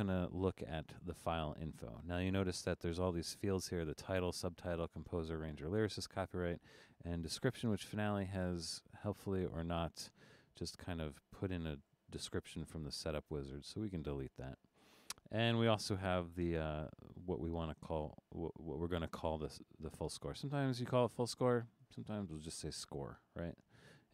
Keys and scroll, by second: 12.5 BackSpace, 22.4 BackSpace.